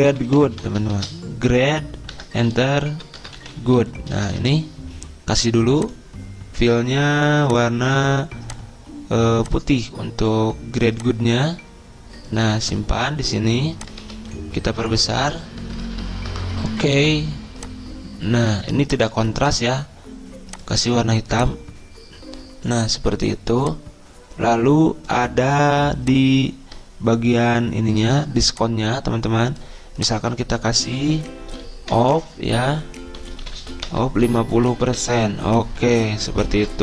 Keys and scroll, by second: 0.4-5.5 typing, 2.6 Return, 14.6 ctrl+a, 15.6 ctrl+], 15.7 ctrl+], 15.8 ctrl+], 19.7 ctrl+a, 30.7 ctrl+a, 32.1-35.6 typing, 34.4 Return.